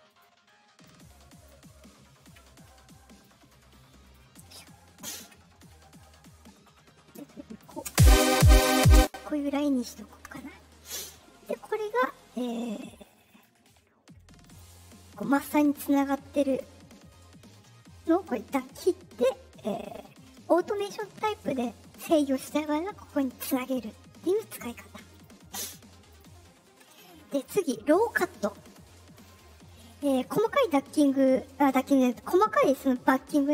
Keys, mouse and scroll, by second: 0.0 right click, 0.8 click, 3.1 right click, 4.0 right click, 7.1 click, 7.8 space, 8.9 space, 11.7 click, 13.2 click, 14.4 click, 15.1 click, 16.4 click, 18.2 click, 23.2 click, 25.0 click, 26.0 click, 27.2 click.